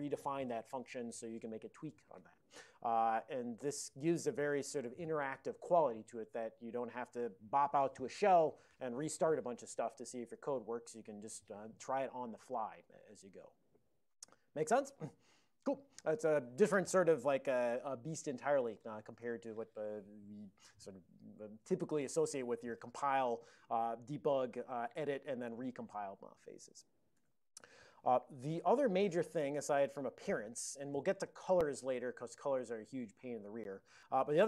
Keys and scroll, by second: 17.5 alt+n, 18.8 ctrl+l, 19.3 ctrl+l, 27.2 shift+Tab.